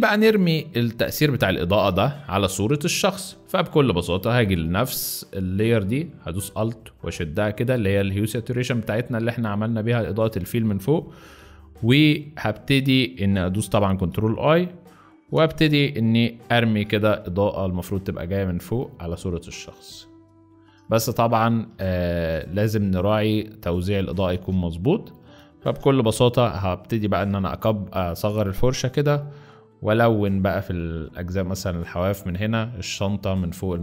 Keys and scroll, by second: 1.7 space, 11.0 ctrl+alt+a, 12.1 BackSpace, 13.5 ctrl+i, 14.2 ctrl+z, 15.4 ctrl+b, 16.9 x, 21.0 ctrl+z, 21.6 ctrl+z, 22.5 ctrl+z, 24.2 ctrl+z, 25.5 b, 25.9 [, 27.1 [, 27.2 [, 28.9 x, 29.6 x.